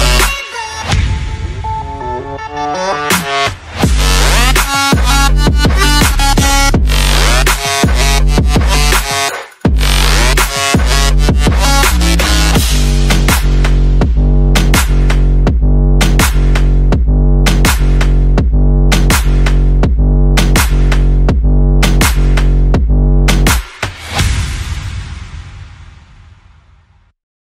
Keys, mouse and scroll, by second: 0.5 click, 1.5 click, 1.8 click, 1.8 scroll up 1, 2.0 scroll down 1, 16.0 click, 16.3 scroll up 1, 16.5 scroll down 1.